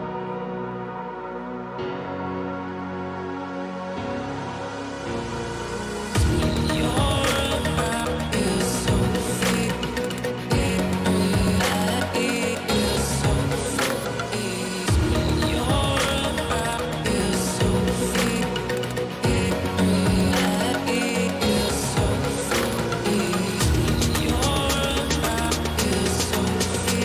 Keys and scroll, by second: 10.4 [, 11.0 =, 12.8 ctrl+=, 14.2 ctrl+=, 15.5 ctrl+-, 15.9 [, 16.6 ctrl+[.